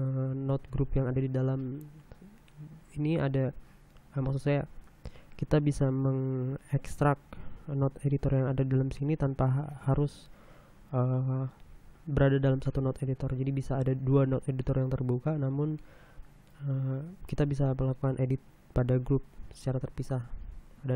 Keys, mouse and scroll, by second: 0.0 middle click.